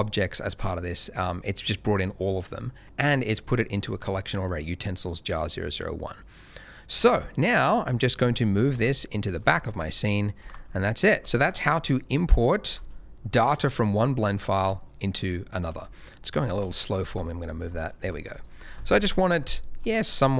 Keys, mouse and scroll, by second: 0.9 middle click, 2.4 click, 5.6 middle click, 7.0 g, 7.1 middle click, 8.0 click, 8.3 shift+middle click, 8.7 g, 9.0 middle click, 9.3 click, 9.5 shift+middle click, 9.8-10.3 shift+scroll up 2, 10.3 g, 10.5 z, 11.0 click, 11.2 shift+middle click, 11.4 shift+scroll up 2, 11.8 middle click, 12.6 g, 12.7 z, 13.3 click, 13.6 middle click, 14.3 scroll down 1, 14.7 shift+middle click, 15.6 z, 16.2 middle click, 16.6 shift+middle click, 17.0 shift+g, 17.1 middle click, 17.5 click, 17.7 middle click, 18.0 g, 18.0 middle click, 18.3 click, 18.6-18.9 scroll down 1, 18.9 KP_0.